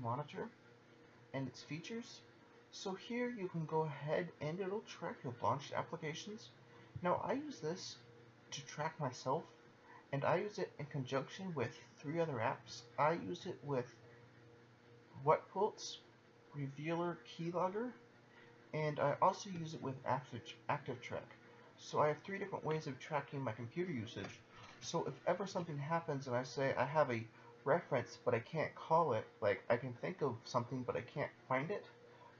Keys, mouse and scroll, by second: 7.2 click, 7.4 double click.